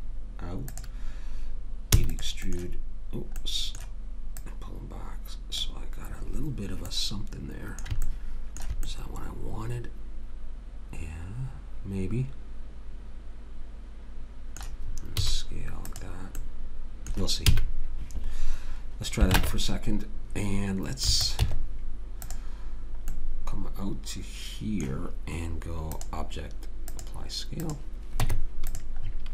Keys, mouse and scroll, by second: 1.9 e, 2.5-4.4 middle drag, 4.4 click, 8.1-10.7 middle drag, 15.2 s, 16.4-18.4 middle drag, 17.5 a, 19.4 ctrl+Tab, 21.4 Tab, 28.3 Tab.